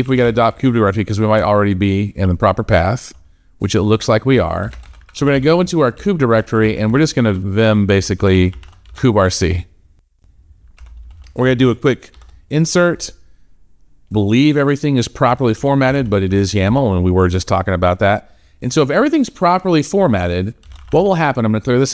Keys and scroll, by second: 6.2 BackSpace, 7.7 BackSpace, 12.0 shift+Insert, 15.4 shift+:, 16.1 shift+1.